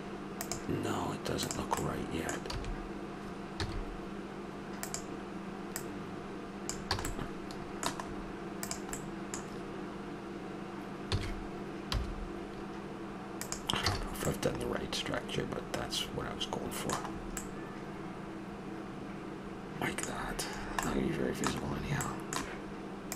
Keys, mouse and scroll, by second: 1.4-1.9 right drag, 2.5 d, 3.6 s, 5.7 click, 6.9 a, 8.6-10.4 right drag, 11.1 s, 13.9 a, 14.1-16.2 middle drag, 16.2-17.2 scroll up 1, 17.2 middle drag, 19.3 middle click, 20.1-22.4 middle drag.